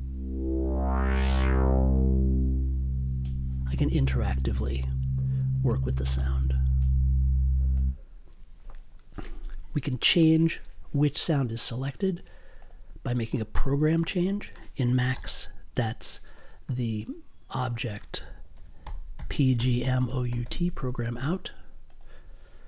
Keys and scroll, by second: 9.5 space, 12.1 space, 15.1 m, 18.5-20.4 typing.